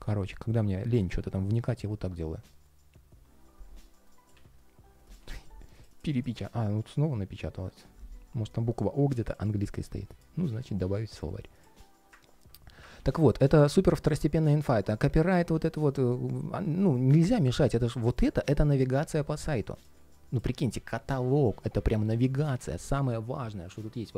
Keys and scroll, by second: 12.7 super+z.